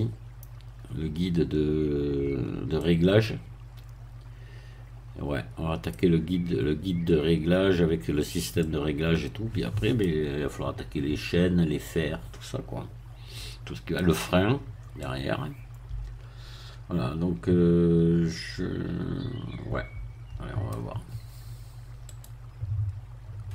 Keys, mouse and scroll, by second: 2.7-6.0 middle drag, 8.6-10.2 middle drag, 11.8-14.4 middle drag, 15.0-21.0 middle drag, 22.1 right click.